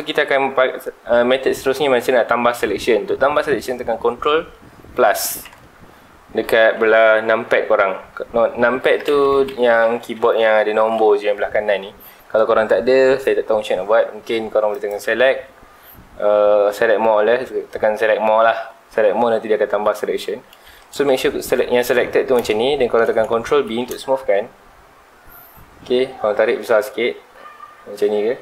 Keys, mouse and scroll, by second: 5.4 ctrl+KP_Add, 14.7-17.9 drag, 21.8-22.4 scroll up 2, 22.4-23.7 shift+middle drag, 23.7 ctrl+b.